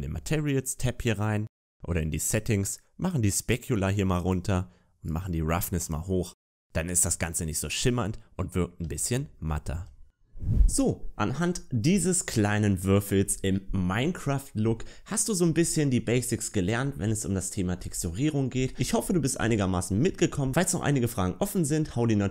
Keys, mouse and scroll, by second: 3.1 click, 3.1 scroll down 10, 5.1 click, 6.2 middle click, 8.7 a, 8.9 a.